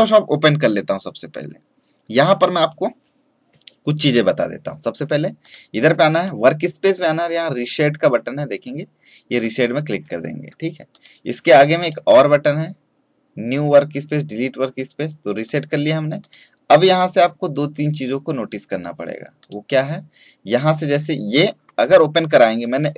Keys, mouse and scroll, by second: 5.4 click, 9.3 click, 15.4 click, 19.3 click, 20.4 click.